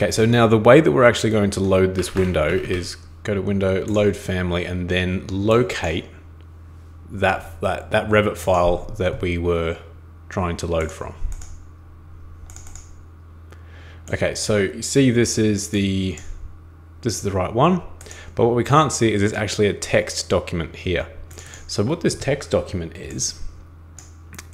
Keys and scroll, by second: 2.0 super+Escape, 2.2 super+Escape, 2.5 super+x.